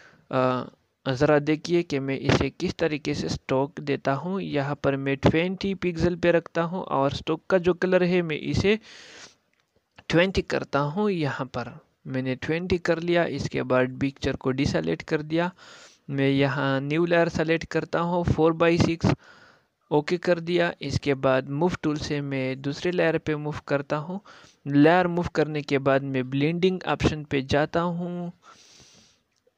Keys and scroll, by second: 12.4 ctrl+n.